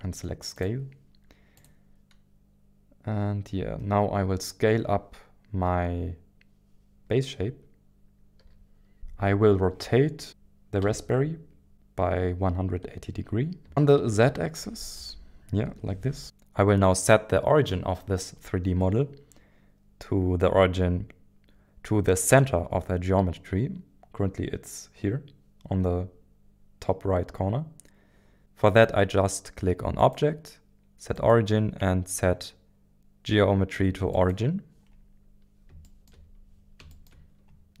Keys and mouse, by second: 8.4 s, 10.2 e, 10.8 r, 13.7-15.7 typing, 15.8 Return, 30.0-35.1 drag, 35.8 shift+middle drag, 36.9-37.8 shift+middle drag.